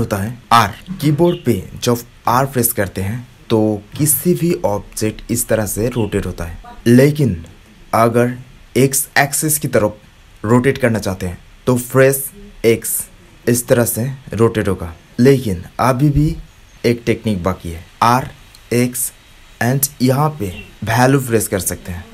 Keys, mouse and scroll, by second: 2.3 r, 7.2-9.8 drag.